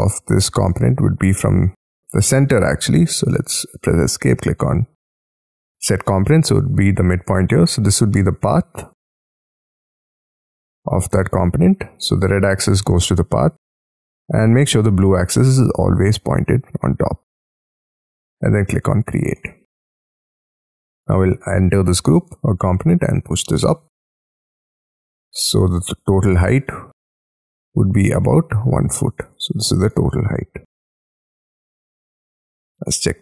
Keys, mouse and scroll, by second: 0.4-1.0 scroll up 4, 2.3 Escape, 10.9 middle click, 11.4 scroll down 1, 11.6 scroll up 1, 11.8-12.9 scroll down 11, 12.9 middle click, 13.4 scroll down 5, 19.4 middle click, 20.3 scroll up 6, 21.1 double click, 23.1 middle click, 23.9 middle click, 24.5 j, 25.0-25.7 scroll down 11, 25.7 shift+middle click, 26.4 scroll up 6, 29.3 space, 30.1 middle click, 30.7 Escape, 31.0 scroll down 6, 31.3 m, 32.7 t.